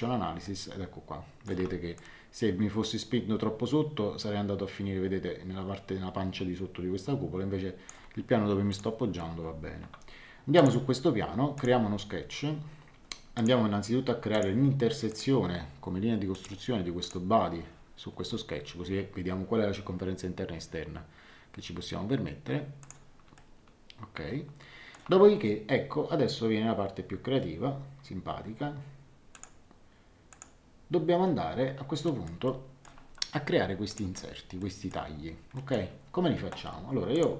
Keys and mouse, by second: 0.4 shift+middle click, 1.9 click, 8.7 click, 10.5 click, 13.3 click, 16.3 click, 22.8 click, 23.3 shift+middle click, 29.3 click, 32.0 middle click, 32.4 shift+middle click, 33.9 click, 34.6 middle click, 37.1 click.